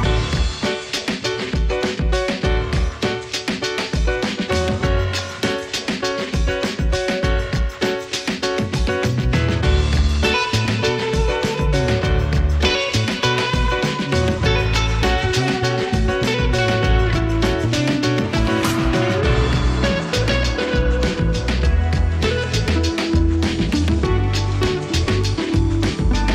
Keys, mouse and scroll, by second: 0.2 right click, 0.9 click, 2.6 Return, 2.8 c, 2.9 c, 3.2 Return, 3.8 ctrl+space, 4.0-5.1 typing, 7.0-13.9 drag, 14.3 ctrl+space, 14.7-15.6 typing, 17.1-20.0 drag, 22.8 click, 24.4 space.